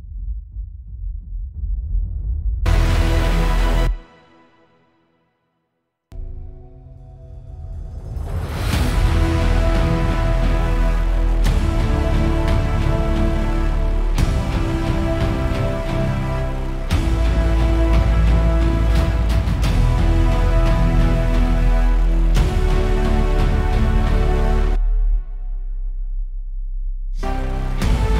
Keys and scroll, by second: 4.1 space, 4.2 =, 5.4 =, 5.9 super+=, 7.1 super+s, 12.0 super+=.